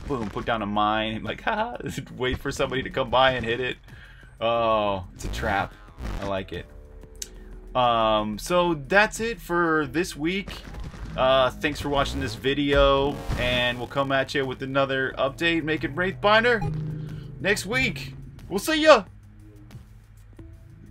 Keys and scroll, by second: 0.0-11.9 typing, 13.0-20.9 typing.